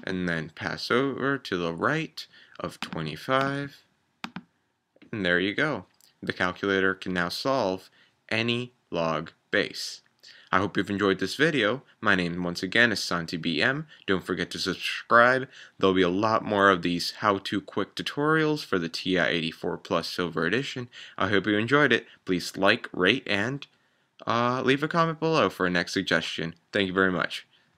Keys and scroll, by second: 0.0 Right, 0.0 2, 2.8 2, 3.3 5, 4.2 Return.